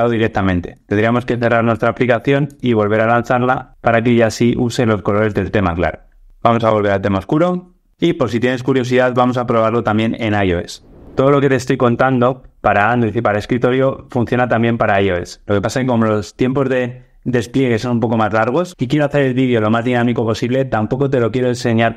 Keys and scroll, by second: 2.4 ctrl+r.